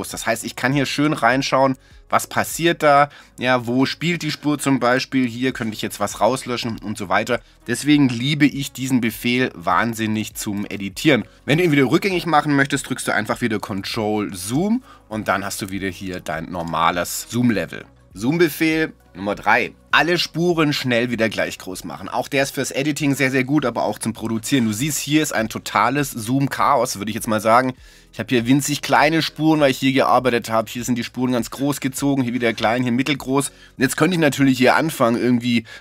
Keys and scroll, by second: 1.7 Down, 8.4 Up, 14.3 ctrl+z.